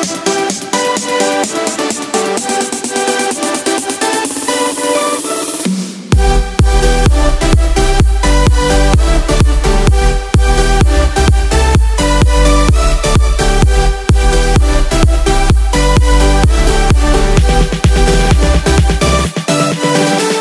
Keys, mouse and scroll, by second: 0.1-3.6 drag, 9.3 click, 9.7-11.2 drag, 14.0 Return, 15.0 ctrl+1, 15.6 ctrl+KP_Add, 17.9 click.